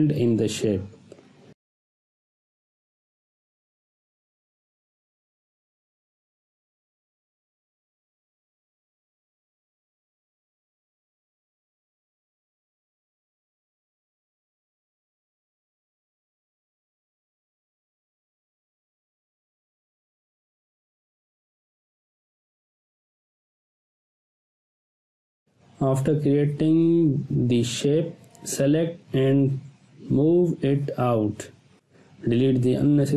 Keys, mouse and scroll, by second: 12.2 ctrl+z, 12.9-14.1 drag, 17.2 space, 17.3-17.9 ctrl+drag, 22.5 ctrl+z, 22.9 click, 24.9 right click, 26.2-30.1 drag, 28.4-29.0 drag, 30.1-30.4 scroll down 1, 32.0-32.6 drag.